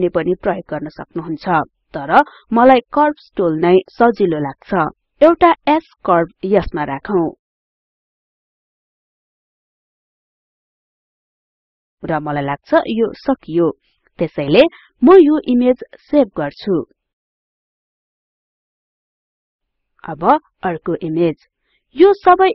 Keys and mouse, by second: 0.0-2.0 drag, 3.0-6.0 drag, 15.0 click, 17.5-19.0 drag, 19.5 click.